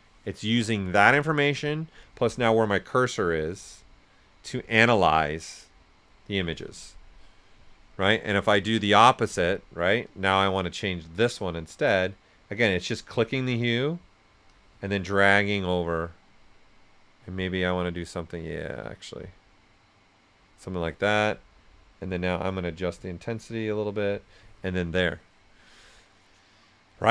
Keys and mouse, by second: 8.1 ctrl+z, 9.5-26.3 drag.